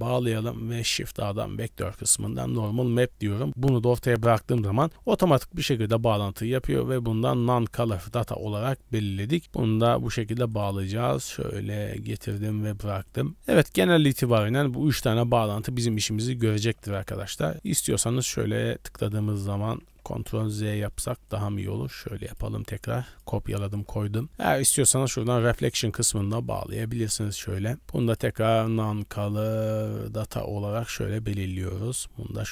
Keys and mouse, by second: 0.2 shift+a, 3.9 middle click, 5.6-7.6 drag, 7.9 click, 9.4 click, 10.5 click, 11.2-12.4 drag, 15.4 click, 16.2 middle click, 16.7 g, 17.5 shift+d, 18.4-19.3 drag, 20.3 ctrl+z, 20.9 middle click, 21.3 click, 21.6 shift+d, 23.1 click, 26.2-27.3 drag, 28.0-30.9 drag, 31.8-32.5 drag.